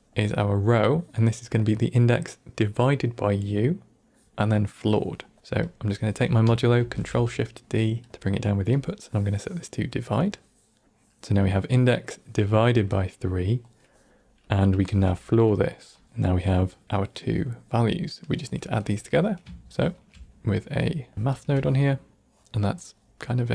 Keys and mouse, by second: 5.2 middle click, 5.5 click, 6.7 ctrl+shift+d, 8.7-10.1 drag, 13.9 middle click, 14.4 click, 14.8 shift+d, 15.9 click, 16.8 middle click, 17.9 middle click, 19.1 middle click, 19.6 ctrl+shift+drag, 20.6 middle click, 21.1 ctrl+shift+click, 21.1 ctrl+shift+right click, 22.0-22.4 drag, 22.4 ctrl+middle click.